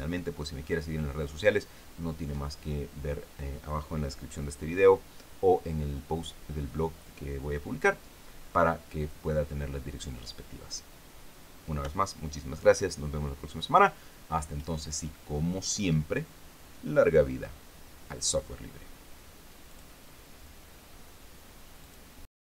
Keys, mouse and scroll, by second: 20.1 click, 22.3 click.